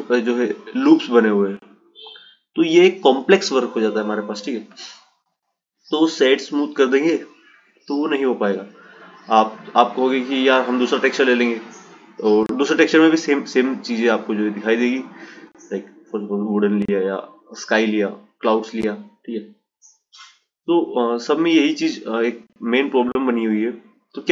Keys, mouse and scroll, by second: 1.5 click, 3.1 click, 4.8-7.8 right drag, 9.1 click, 10.0 click, 11.4-14.5 drag, 15.5-18.4 drag, 19.0-22.1 drag.